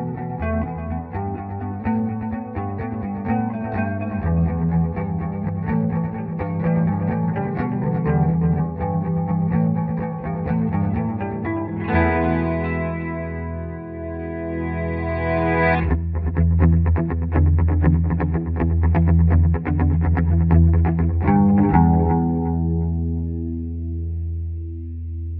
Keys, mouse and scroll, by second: 0.6 click, 1.0 Home, 1.6 Delete, 2.9 click, 3.5 F12, 4.7 click, 5.4 Home, 6.0 Delete, 7.7-10.0 drag, 10.0-14.0 drag, 14.0 ctrl+k, 14.7-16.8 drag, 16.8 ctrl+k, 18.2 click, 19.8 ctrl+j, 20.9 Escape, 23.2 Page_Up, 24.0 ctrl+click.